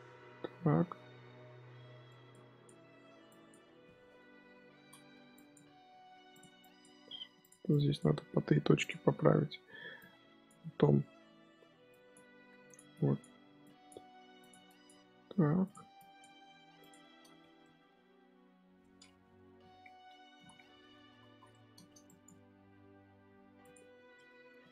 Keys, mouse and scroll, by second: 2.2 click, 3.2 click, 4.3 KP_7, 5.3 click, 5.7 g, 6.5 click, 6.9 g, 7.6 click, 8.0 g, 9.9 click, 11.8 click, 12.2 g, 12.8 click, 13.5 click, 13.9 g, 14.6 click, 14.9 g, 15.9 click, 16.3 g, 17.3 Tab, 17.5-19.1 middle drag, 19.1 KP_1, 20.3 ctrl+KP_3, 20.9 Tab, 21.2 z, 21.4 shift+middle click, 22.0 click, 22.4 g, 24.1 middle click, 24.5 z.